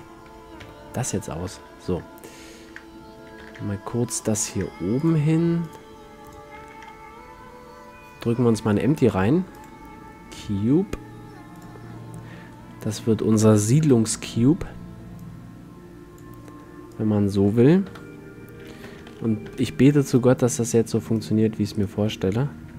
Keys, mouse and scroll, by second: 0.7 KP_1, 1.7-2.3 middle drag, 3.5 shift+c, 6.9 shift+a, 10.5 s, 12.5-13.3 middle drag, 13.9 KP_7, 18.0 KP_1, 18.9 z, 19.7 b, 22.1 click.